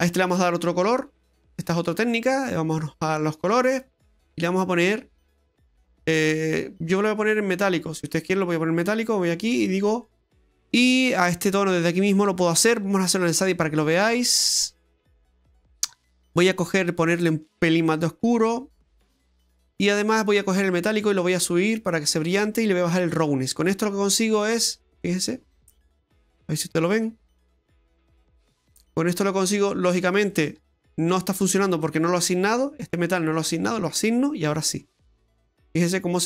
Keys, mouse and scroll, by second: 1.4 click, 2.3-2.8 scroll down 5, 3.0-4.1 scroll up 15, 4.8 click, 9.5 click, 10.3-10.8 scroll down 6, 13.5 click, 13.9-14.9 scroll down 7, 14.9 middle click, 14.9-15.7 scroll down 8, 15.7-16.4 scroll up 9, 17.1 click, 20.9 click, 23.0 click, 24.7 middle click, 26.0 shift+middle click, 27.3 Tab, 27.6-27.9 scroll down 1, 27.9 middle click, 28.8 middle click, 30.6 Tab, 33.6 click, 35.2 Tab, 35.5 middle click.